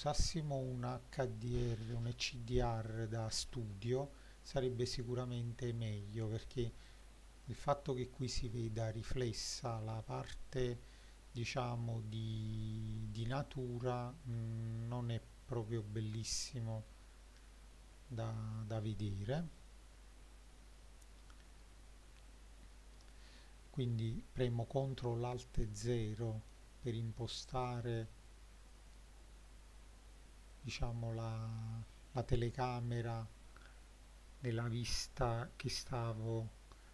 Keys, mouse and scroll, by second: 2.9 click, 5.5 click, 6.1 click, 6.9 click, 14.4-15.9 shift+middle drag, 16.3-17.4 shift+middle drag, 17.7-18.2 middle drag, 19.6 click, 21.5-23.1 middle drag, 25.4 ctrl+alt+KP_0, 27.5 click, 28.8 scroll up 1, 29.8-30.2 scroll down 2, 32.5 n.